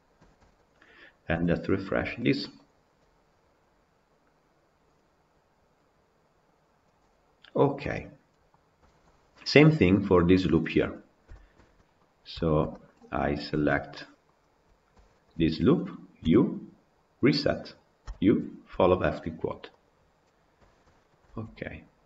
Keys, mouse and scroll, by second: 0.2 Tab, 0.4 click, 1.2 KP_Decimal, 7.2-7.6 scroll up 1, 7.6-10.6 middle drag, 10.6-11.2 scroll down 9, 11.2-11.9 shift+middle drag, 11.9 scroll up 1, 12.2-13.2 shift+middle drag, 13.2 click, 13.5 Tab, 13.8 middle click, 14.3 scroll up 1, 15.1 alt+click, 17.5 u, 19.9 u, 20.3 scroll down 3, 20.5 shift+middle click, 21.3 Tab, 21.4-21.9 scroll up 8.